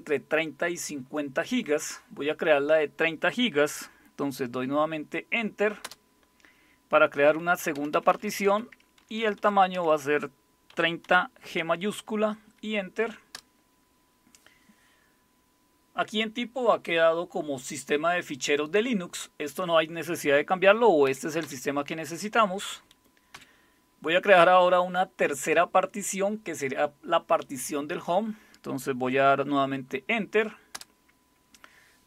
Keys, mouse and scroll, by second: 5.8 Return, 7.7 Left, 7.9 Left, 8.1 Left, 8.3 Left, 8.4 Left, 9.0 Delete, 9.2 Delete, 9.4 Delete, 9.7 Delete, 10.7-11.0 typing, 13.3 Return, 21.0 Up, 21.4 Down, 23.3 Down, 30.7 Return.